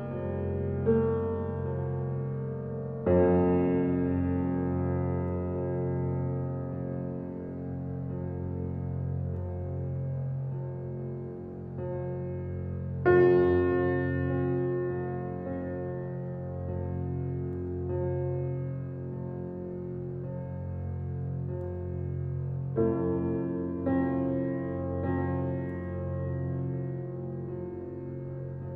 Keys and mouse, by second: 2.2 click, 3.5 click, 5.4 click, 7.1-7.9 drag, 9.3 s, 13.5 click, 14.4 s, 17.4 click, 18.7 click, 19.6 click, 20.4 click, 20.9 2, 21.4 shift+click, 21.6 shift+click, 22.3 click, 23.5 s, 26.5 shift+click, 26.7 shift+click, 27.3 s.